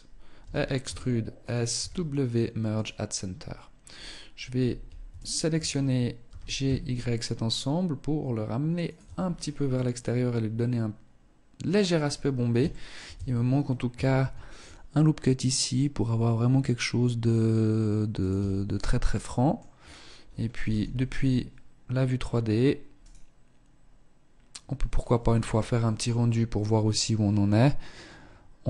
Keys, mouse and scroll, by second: 0.9 w, 2.5-2.8 scroll up 3, 4.3 alt+shift+right click, 5.4 g, 8.2 Tab, 8.3-8.7 scroll down 4, 8.9 middle click, 11.1-11.5 scroll up 4, 11.9 shift+middle click, 12.3 Tab, 13.3 ctrl+r, 17.5 Tab, 17.8-18.4 scroll down 4, 18.2 middle click, 18.9-19.8 scroll down 1, 19.8 scroll down 1, 19.8 KP_0, 22.2 right click.